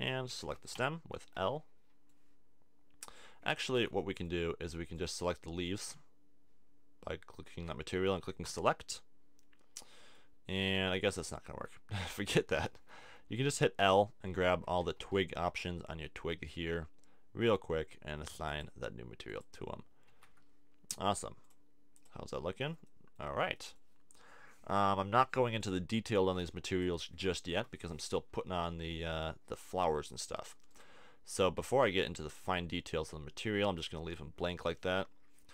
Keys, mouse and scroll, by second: 0.4 a, 0.7 l, 1.6 middle click, 3.7 a, 8.4-9.8 drag, 9.8 middle click, 10.3-13.0 drag, 11.5 a, 13.0 l, 14.5-15.9 typing, 16.5-18.5 middle drag, 19.1 middle click, 20.1 a, 20.3 Tab, 33.1 click.